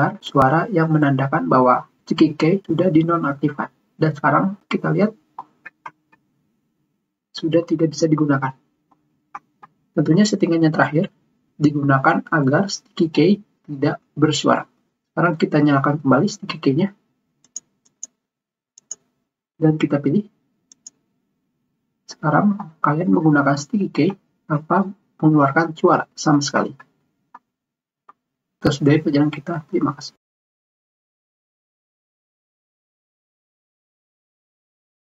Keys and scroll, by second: 23.5 ctrl+alt+shift+Escape, 24.7 Caps_Lock.